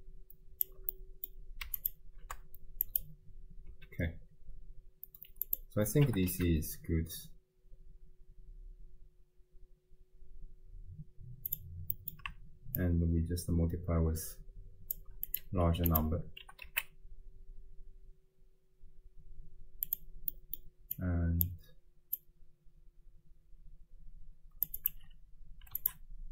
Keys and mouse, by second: 0.9 click, 1.9 ctrl+shift+click, 3.0 click, 3.8 x, 5.5 click, 6.1 g, 12.0 middle click, 12.8-14.9 shift+drag, 15.3 click, 16.4 g, 20.4 middle click, 21.0 click, 22.2-24.7 drag, 24.8-25.9 drag.